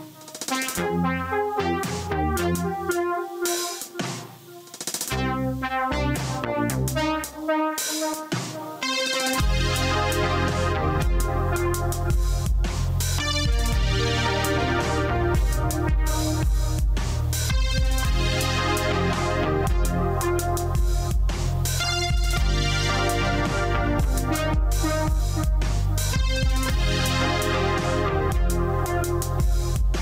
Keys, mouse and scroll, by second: 1.2 3, 3.9 click, 4.3 q, 5.8 click, 7.4 v, 8.2 click, 9.0 ctrl+1, 10.1 2, 11.3 q, 12.3 click, 19.6 middle click, 21.2 x, 22.7 shift+click, 24.4 shift+click.